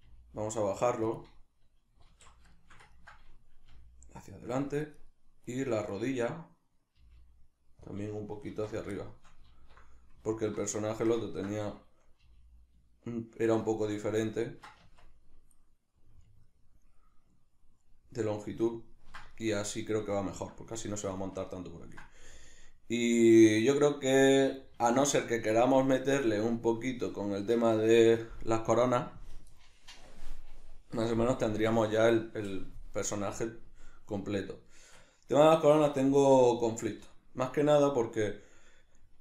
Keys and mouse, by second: 0.1 g, 1.1 click, 2.1 alt+q, 2.5-4.6 shift+middle drag, 3.7 g, 4.6 click, 5.0 right click, 5.5 right click, 5.9 right click, 6.1 right click, 7.0 g, 8.0 click, 8.5 alt+q, 9.0-12.2 shift+middle drag, 9.5 alt+q, 12.2 g, 13.8 shift+click, 14.3 ctrl+middle click, 14.8 Tab, 15.9 middle click, 18.1-39.2 middle drag, 24.7 alt+q.